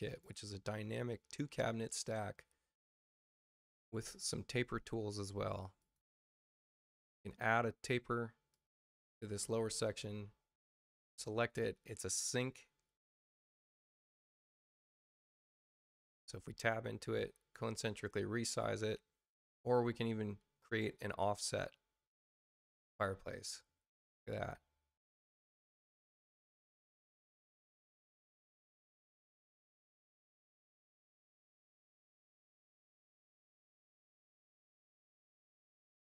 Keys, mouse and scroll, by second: 0.0 click, 1.0 click, 5.7 click, 6.9 click, 8.4 click, 9.8 space, 10.5 click, 12.6 space, 14.0 space, 14.5 click, 15.1 click, 15.8 Return, 17.2 c, 17.8 click, 20.6 click, 21.5-22.5 drag, 24.3 click, 26.1 click, 30.2 click, 32.6 middle click, 33.3 click, 34.5 click, 35.2 click.